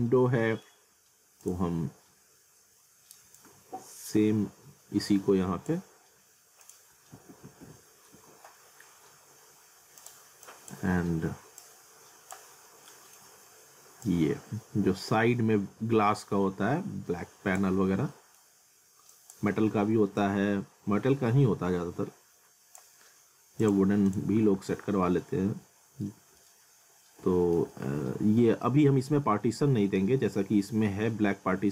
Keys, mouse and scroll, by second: 1.4 click, 1.8 scroll up 1, 3.3 click, 7.1 alt+w, 8.1 z, 9.0-9.5 scroll down 1, 10.0 click, 12.6 scroll up 1, 12.9 middle click, 14.1 click, 17.8 scroll down 1, 18.1 middle click, 18.6 scroll up 1, 19.1 click, 20.2 click, 24.4 alt+w, 25.2 alt+middle click, 26.1 scroll down 1, 26.4 alt+middle click, 27.7 alt+middle click, 29.2 alt+middle click, 30.3 scroll up 1, 30.5 alt+middle click.